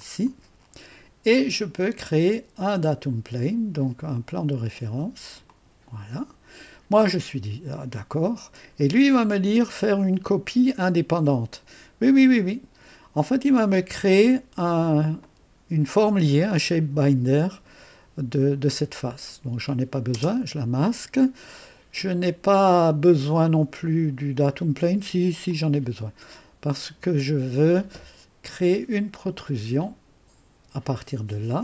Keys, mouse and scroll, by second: 0.0 click, 5.5 click, 8.1 click, 12.2 click, 15.2 click, 20.1 space, 25.5-27.3 drag, 29.8 click.